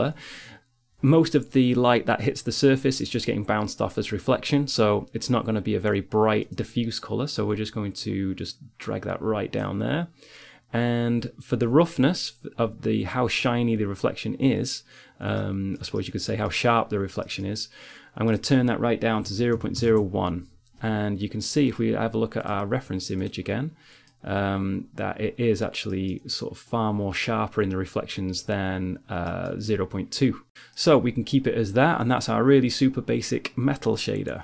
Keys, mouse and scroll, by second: 6.8 click, 9.6-12.0 middle drag, 14.7-17.6 middle drag, 17.6-19.6 drag, 19.6 middle click, 21.6-23.8 drag, 25.5 click, 26.5 middle click, 28.2 middle click, 30.2 click, 30.8-32.3 drag, 33.2-34.4 middle drag.